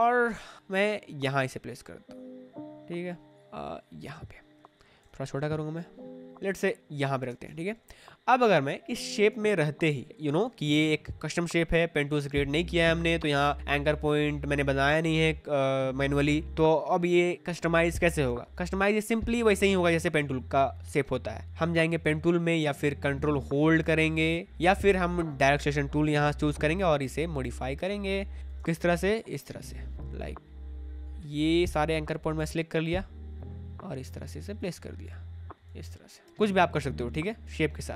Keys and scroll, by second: 0.2 space, 5.0 ctrl+t, 7.2 space, 7.4 0, 7.5 Left, 8.6 space, 21.4 ctrl+z, 27.8 space.